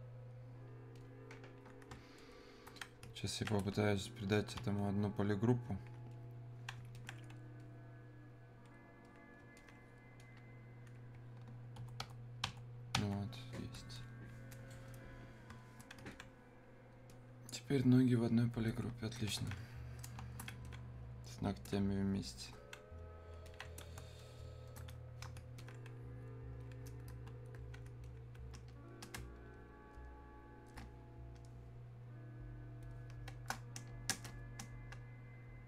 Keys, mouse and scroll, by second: 6.2-13.4 drag, 13.4 click, 14.0-19.5 alt+drag, 19.5 alt+click, 20.7-22.5 drag, 23.5 alt+click, 25.6-28.1 alt+drag, 29.2 space, 30.0 click, 30.1 space, 32.9 click, 32.9 click, 33.3 space, 35.5 click.